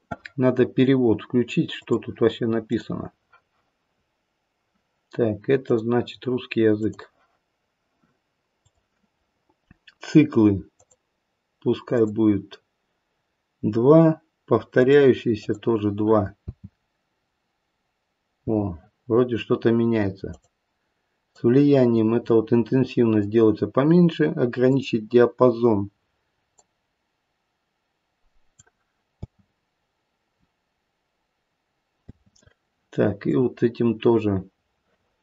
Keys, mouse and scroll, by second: 2.9 click, 10.7 click, 11.9 click, 14.8 click, 15.4 click, 16.4 space, 18.4 space, 20.2 click, 21.2 click, 24.6 click, 26.5 click, 29.2 space, 32.0 space, 33.2 click.